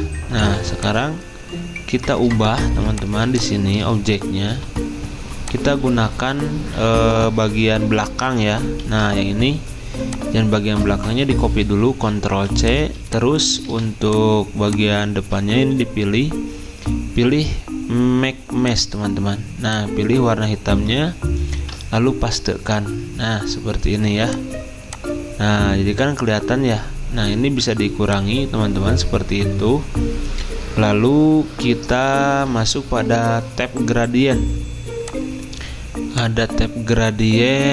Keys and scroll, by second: 4.5 v, 8.9 ctrl+z, 10.7 ctrl+z, 11.9 ctrl+c, 12.3 typing, 13.6 typing, 15.2 ctrl+z, 21.6 ctrl+v.